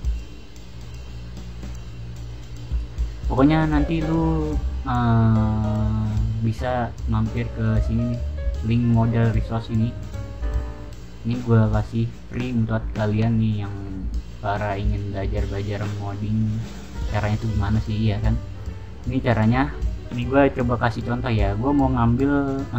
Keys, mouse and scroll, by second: 1.6-2.2 scroll up 1, 2.4-2.9 scroll down 1, 2.9-4.0 middle drag, 7.6 click, 10.0 click, 10.3 click, 12.2 click, 12.6 scroll up 1, 12.8-13.7 scroll down 2, 15.5 scroll down 1, 16.2 scroll down 1, 18.3-19.1 scroll down 1.